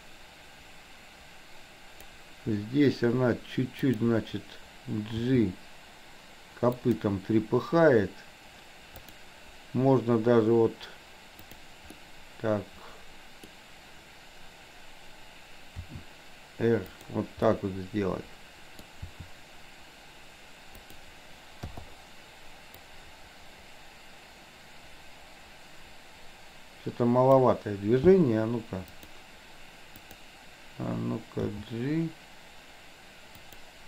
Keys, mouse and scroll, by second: 0.1-2.3 drag, 5.1 g, 9.0 click, 11.4 click, 12.0-13.6 middle drag, 15.9 r, 17.5-19.0 middle drag, 19.1 r, 21.8 i, 23.0-27.6 drag, 28.9 click, 30.0 click, 31.5 g.